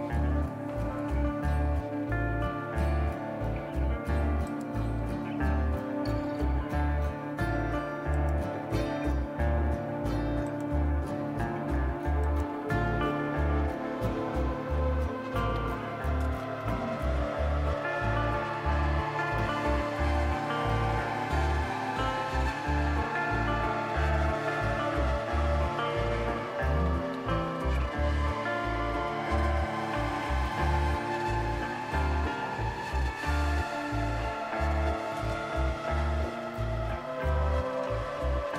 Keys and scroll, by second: 15.1 typing, 16.4-17.0 typing, 26.4-30.5 typing, 31.6 typing, 32.8-33.7 typing, 34.9 typing, 36.6-37.0 typing, 37.0 Tab.